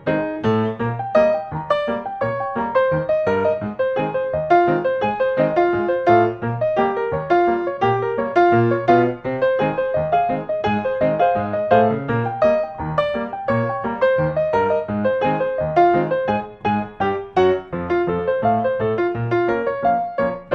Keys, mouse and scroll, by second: 0.8-1.1 scroll, 2.1 middle click, 2.1 middle click, 2.3 middle click, 4.5-5.9 scroll, 8.1 click, 9.3-10.5 drag, 15.0-16.1 middle drag, 17.0 middle click, 17.2-17.9 scroll.